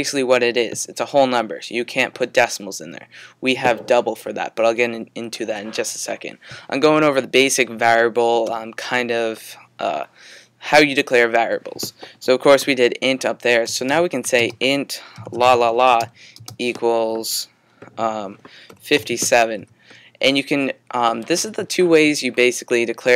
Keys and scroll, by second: 13.4-17.3 typing, 18.7 typing.